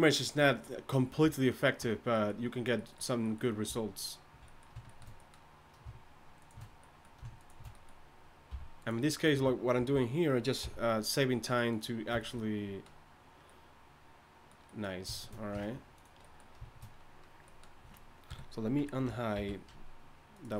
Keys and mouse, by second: 4.0-8.5 drag, 8.5 v, 9.8 ctrl+l, 10.6 x, 15.6 ctrl+Tab, 18.3 KP_3, 18.8 Tab, 19.4 alt+h.